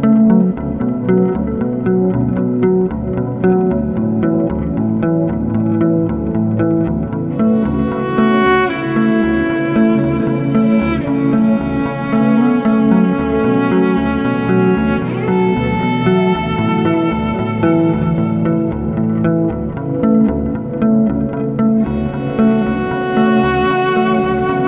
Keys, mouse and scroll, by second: 0.0-3.8 drag, 3.8-4.2 scroll down 1, 4.2-5.8 drag, 5.8-6.2 scroll up 8, 5.9 shift+middle click, 6.2-8.3 middle drag, 8.3 scroll down 1, 8.4-15.3 shift+middle drag, 15.3 click.